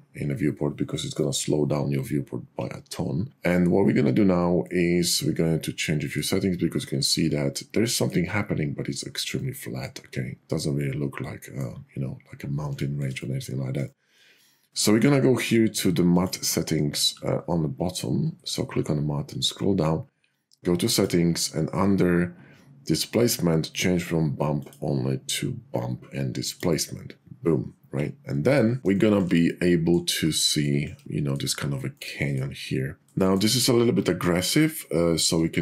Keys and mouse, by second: 4.7 middle click, 5.1-6.2 drag, 6.9 click, 7.7 middle click, 7.9 click, 9.4-11.7 middle drag, 13.2 middle click, 16.0 click, 20.8 click, 24.6-26.9 drag, 29.4 middle click, 31.2 middle click, 32.0 middle click.